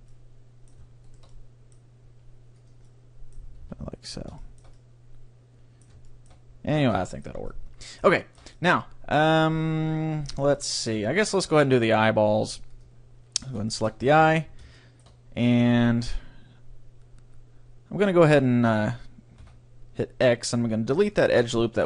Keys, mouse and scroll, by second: 0.1-5.3 middle drag, 1.1-3.0 right drag, 2.2 g, 2.8-4.5 drag, 3.7 Tab, 8.4-10.4 middle drag, 10.5 middle click, 12.4-14.4 drag, 13.5-15.3 right drag, 13.7-17.4 middle drag, 14.2 Tab, 19.5 x.